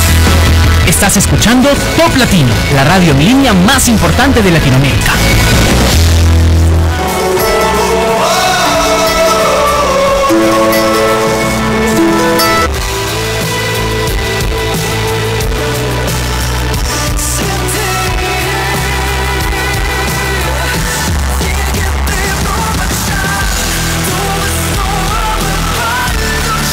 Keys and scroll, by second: 12.8 Page_Down.